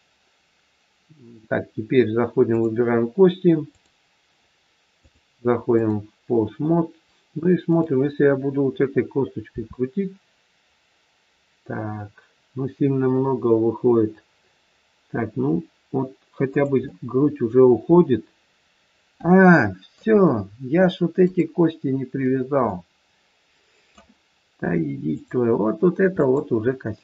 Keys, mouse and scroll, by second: 2.6 click, 9.5 r, 16.8 middle click, 20.2-21.1 scroll up 1, 21.1 click, 22.7 middle click, 25.0 click, 26.8 middle click.